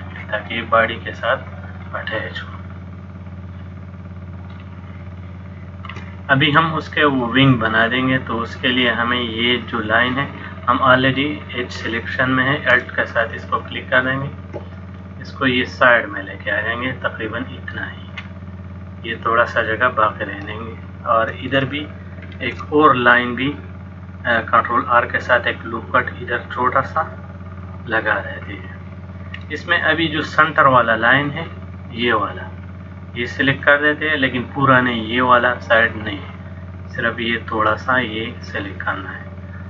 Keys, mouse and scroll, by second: 0.7 middle click, 5.3 shift+middle click, 6.4 middle click, 14.0 alt+click, 15.1 click, 22.5 ctrl+r, 28.6 click, 29.5 middle click, 33.7 click, 38.7 middle click.